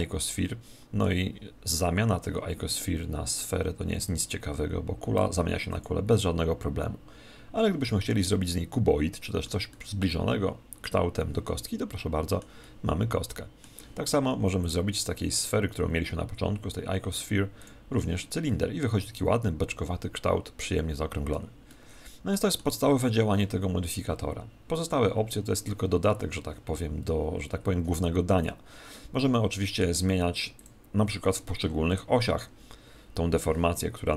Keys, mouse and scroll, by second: 4.0 click, 8.0-14.4 middle drag, 14.5 click, 18.4-23.3 middle drag, 29.1-30.8 middle drag, 30.5 click, 31.5-33.2 middle drag.